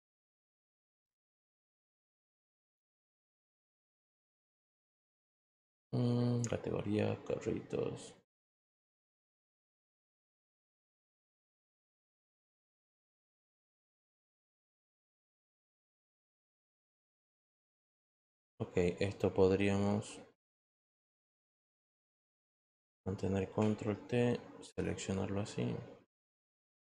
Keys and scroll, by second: 23.7 ctrl+t.